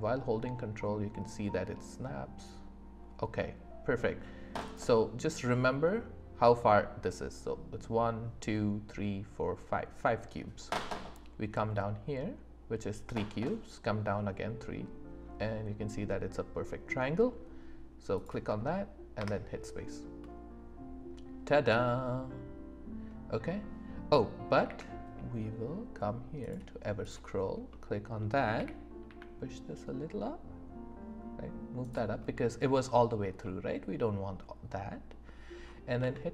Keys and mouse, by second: 4.6 ctrl+click, 18.1 ctrl+click, 19.2 space, 20.2-21.7 middle drag, 21.9-23.1 middle drag, 22.8 click, 24.6 q, 27.0 click, 27.7 middle drag, 28.5 g, 29.0 z, 31.8 click, 32.3 middle click, 33.4-35.1 middle drag, 36.0 Tab.